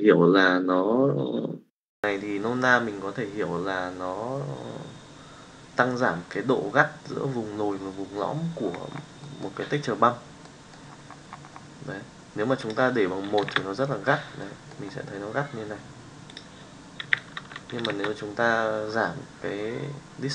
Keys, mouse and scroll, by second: 9.2-9.6 middle drag, 10.6 middle click, 12.7 click, 14.4 middle click, 16.4-18.0 drag.